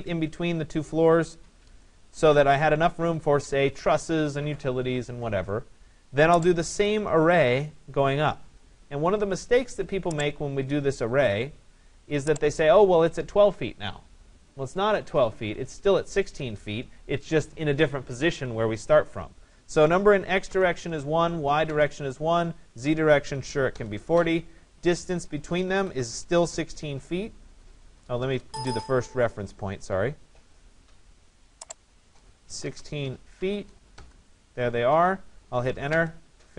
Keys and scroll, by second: 20.5 Return, 25.9 6, 32.5 1, 32.7 6, 34.0 Return.